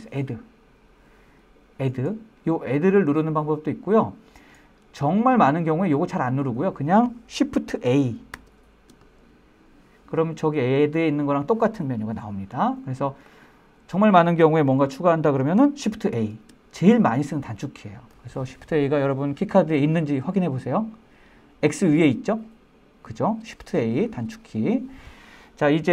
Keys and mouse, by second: 1.4-3.3 drag, 4.4-7.0 drag, 9.8 shift+a, 17.6 shift+a.